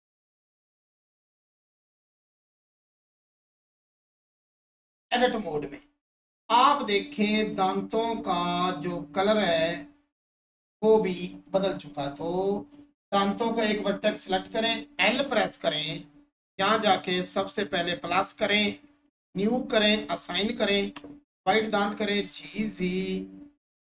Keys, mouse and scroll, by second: 1.2 right click, 3.2 click, 5.0 Tab, 5.9 scroll up 1, 9.5 click, 16.6 click.